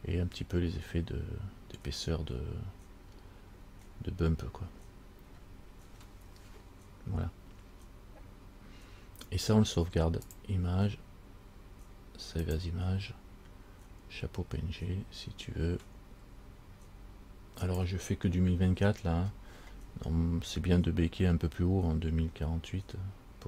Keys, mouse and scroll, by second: 2.4 scroll up 1, 2.9-4.0 scroll up 1, 4.0-4.9 scroll down 1, 4.9-5.9 scroll down 6, 6.2 scroll down 2, 10.4 click, 18.1 click.